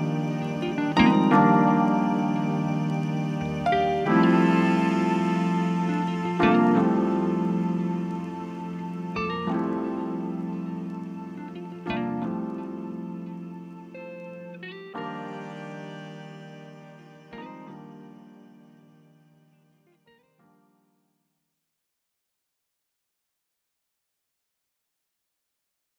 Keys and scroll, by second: 9.7 ., 12.0 shift+f, 16.3 /, 19.1 /, 21.5 /.